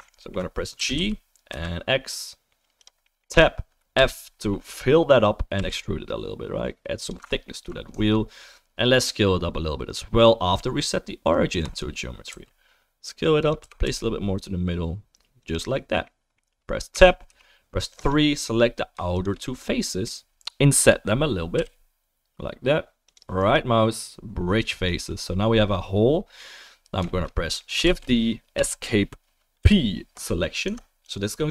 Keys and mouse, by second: 0.0 alt+right click, 0.2 alt+click, 0.3-3.0 alt+right drag, 0.7 g, 3.0-7.3 middle drag, 3.3 Tab, 3.9 f, 5.5 e, 7.3 alt+right click, 7.4 alt+middle click, 7.6-16.0 alt+right drag, 7.9 Tab, 12.3 s, 13.6 g, 16.0-17.9 middle drag, 16.9 Tab, 17.3 3, 17.9 click, 18.1-19.1 middle drag, 19.1 shift+click, 19.2 shift+middle click, 19.3-24.6 drag, 21.6 i, 24.6-28.0 right drag, 27.8 shift+d, 28.0-31.5 drag, 29.6 p, 30.6 Tab.